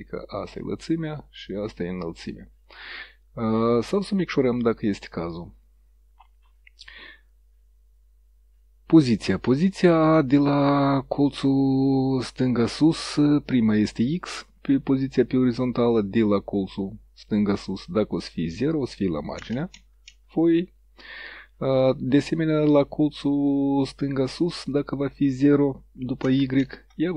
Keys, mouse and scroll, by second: 0.1 click, 2.3 click, 4.5 click, 11.9 click, 15.1 click, 18.2 click, 19.5 KP_0, 24.8 click, 26.3 KP_0, 26.7 KP_Enter.